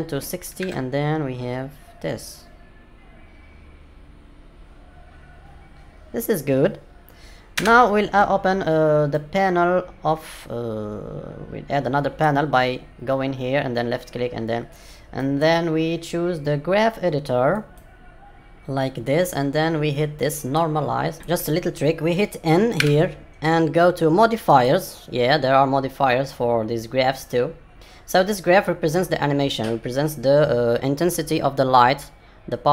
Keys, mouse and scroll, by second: 2.0 space, 7.5 space, 9.1 click.